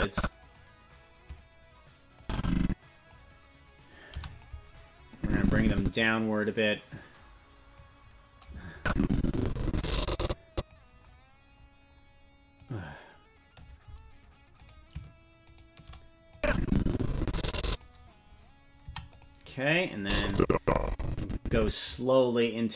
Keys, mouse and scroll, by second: 2.2 click, 4.1 i, 5.1 click, 6.9 click, 8.7-10.7 drag, 12.5-13.6 drag, 14.8 right click, 15.6 shift+right click, 16.3-17.8 drag, 18.8 i, 20.0-21.6 drag.